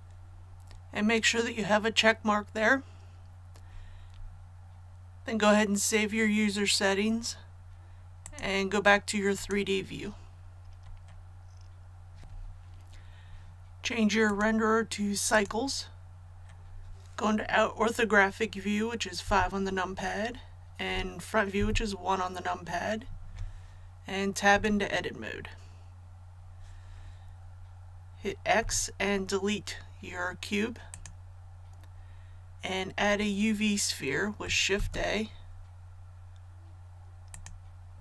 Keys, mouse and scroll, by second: 8.2 click, 19.2 KP_5, 21.5 KP_1, 24.4 Tab, 28.5 x, 30.8 click, 34.7 shift+a, 37.3 click.